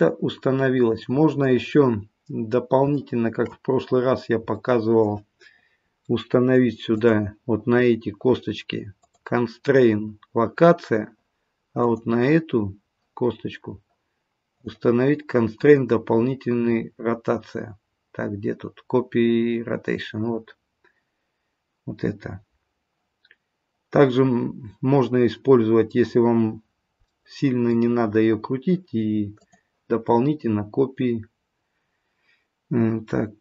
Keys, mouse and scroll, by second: 1.8-2.4 scroll up 1, 2.4-2.8 scroll down 1, 2.9 shift+middle click, 4.6 middle click, 6.9 middle click, 6.9 click, 9.0 click, 27.0 middle click, 29.4 click.